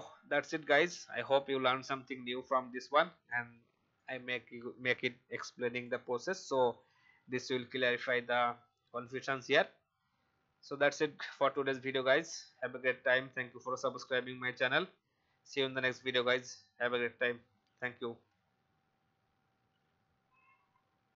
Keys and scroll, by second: 3.6 space, 6.2 v.